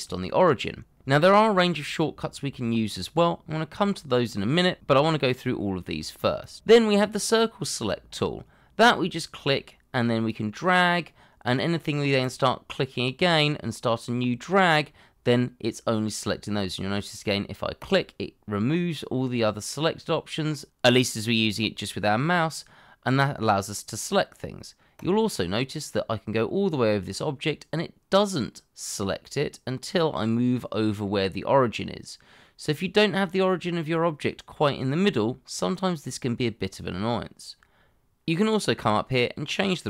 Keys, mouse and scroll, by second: 37.6-38.0 scroll up 1, 38.0 scroll down 1.